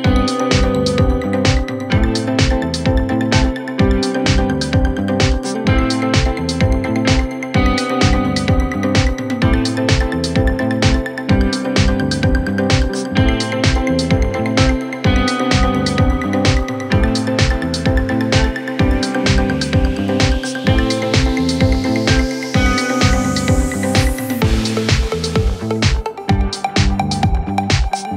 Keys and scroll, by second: 7.7 F1, 9.6 ctrl+d, 9.7 Escape, 13.4 p, 15.0 F1, 15.5 ctrl+d, 19.2 F1, 19.3 F2, 20.8 F1, 20.9 F2.